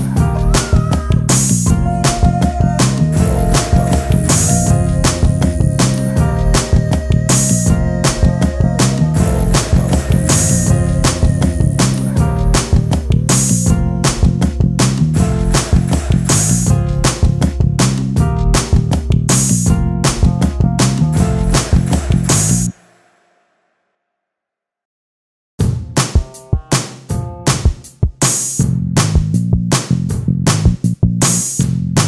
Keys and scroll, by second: 11.3 z, 12.7 space, 21.4 ctrl+z, 22.4 space, 23.4 ctrl+space, 26.9 ctrl+space.